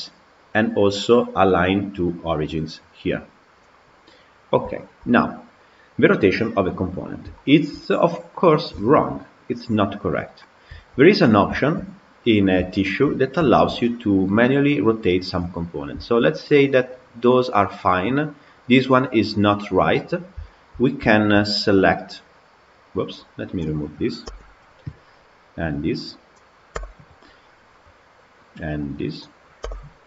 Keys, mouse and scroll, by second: 4.6-6.7 shift+middle drag, 6.7-7.2 scroll up 1, 7.2-8.2 shift+middle drag, 8.2-8.6 scroll up 3, 8.6-10.1 shift+middle drag, 10.1-10.5 scroll down 3, 10.6-13.0 shift+middle drag, 13.0-13.3 scroll down 3, 13.3-16.1 shift+middle drag, 16.1-16.6 scroll up 7, 19.9-20.3 scroll down 5, 20.3-20.6 shift+middle drag, 20.6 scroll down 2, 20.9 shift+middle click, 21.6 click, 22.2 click, 23.0 click, 24.1 Delete, 25.8 click, 26.6 Delete, 29.4 Delete.